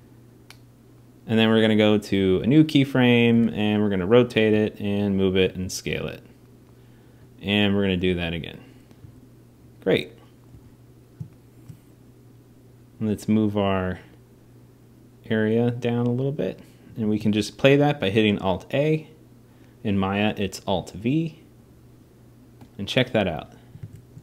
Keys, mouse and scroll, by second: 1.3 click, 3.1 r, 4.3 g, 5.2 s, 7.0 click, 7.8 g, 8.8 s, 10.3 r, 17.0 alt+a.